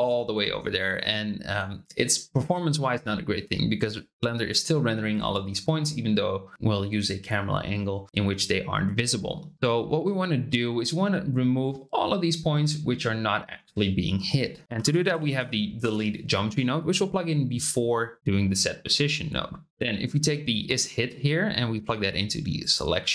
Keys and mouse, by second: 14.6 shift+a, 15.3 e, 19.7-22.7 drag.